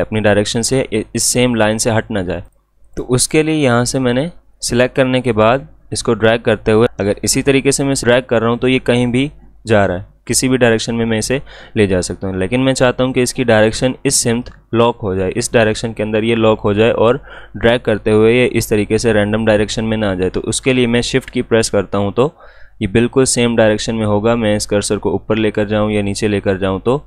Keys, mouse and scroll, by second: 2.4-11.7 drag.